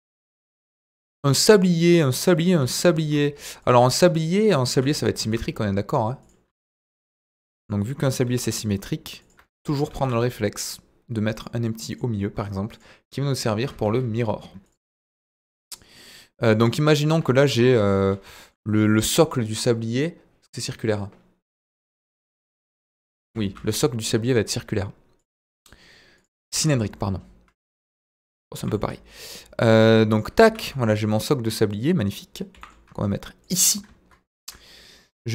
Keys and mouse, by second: 0.8 s, 2.1 click, 2.6 g, 2.6 middle click, 3.6 ctrl+drag, 4.7 s, 5.2 shift+z, 6.2 click, 6.4 s, 6.6 z, 7.5 click, 8.2 g, 8.3 middle click, 9.2 ctrl+click, 9.9 shift+a, 13.8 ctrl+a, 15.9-16.5 middle drag, 17.4 KP_1, 23.2 Delete, 23.4 shift+a, 26.5 s, 26.7 z, 27.9 ctrl+drag, 28.5 g, 28.6 middle click, 30.1 ctrl+drag, 30.4 s, 30.6 z, 31.7 click, 32.5 g, 33.4 ctrl+drag.